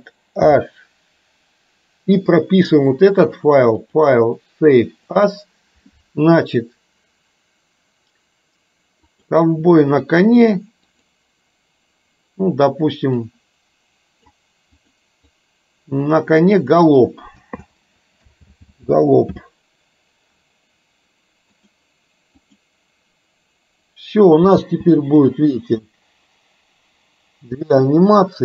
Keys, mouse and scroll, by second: 0.5 alt+h, 3.9-5.6 drag, 24.7 space.